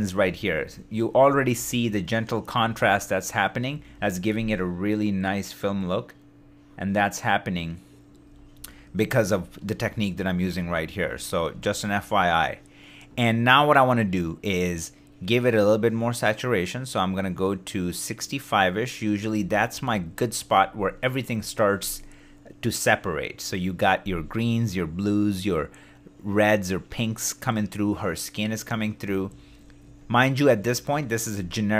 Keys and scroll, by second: 0.0 super+d, 0.6 super+d, 19.7 super+d, 29.4 shift+d.